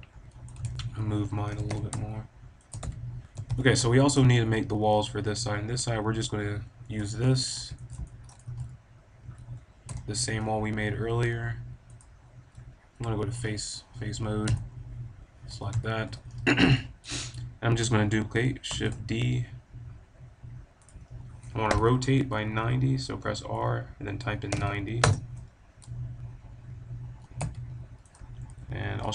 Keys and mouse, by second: 0.6 ctrl+z, 1.4 g, 2.7-3.1 drag, 2.8 a, 3.3 KP_7, 3.5 KP_5, 6.9 l, 8.5 a, 9.8 l, 10.2 middle click, 11.8 click, 13.9 middle click, 14.4 l, 15.4 middle click, 15.4 KP_7, 15.6 KP_5, 16.0 KP_5, 18.0 click, 18.6 shift+d, 20.8-22.7 drag, 21.6 r, 27.1 g, 28.1-29.1 drag, 29.0 shift+d.